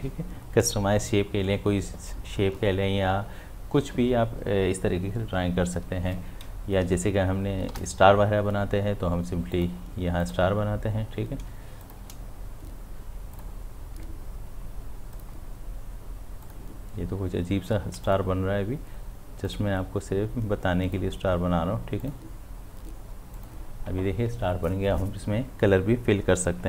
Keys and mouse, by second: 7.4 click, 7.7 ctrl+d, 9.6 click, 11.8 shift+click.